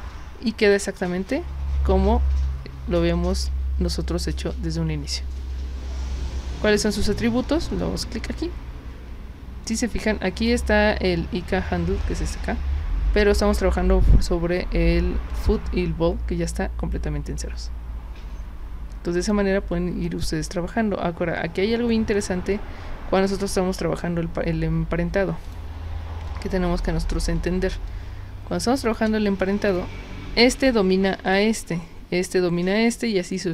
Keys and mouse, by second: 0.9 click, 7.7 click, 9.7 click, 10.4 click, 15.3 click, 19.2 drag, 20.2 click, 22.2 drag, 25.4 click, 26.3-26.8 alt+drag, 27.5 space, 27.9-28.9 drag, 29.7 click, 30.4 click, 31.3 click.